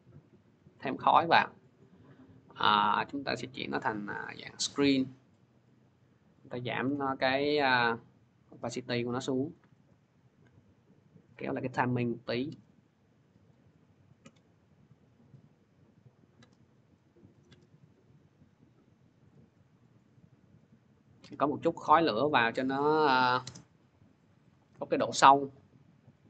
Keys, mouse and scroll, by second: 0.4 click, 1.0 scroll, 1.6-2.7 scroll, 2.7 click, 4.3 click, 6.7 t, 9.3 click, 12.1 click, 13.3 click, 17.3 scroll, 22.1 click, 22.5 click, 23.0-26.2 drag.